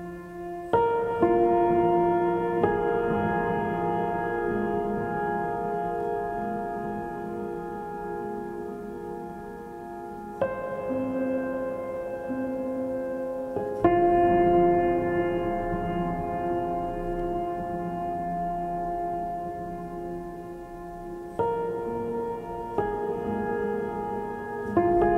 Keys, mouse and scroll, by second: 5.7 right click, 7.1 right click, 8.5 right click, 10.9 right click, 12.0 right click, 13.6 right click, 16.9 right click, 18.0 right click, 20.2 right click, 21.3 right click, 23.2 right click, 24.7 right click.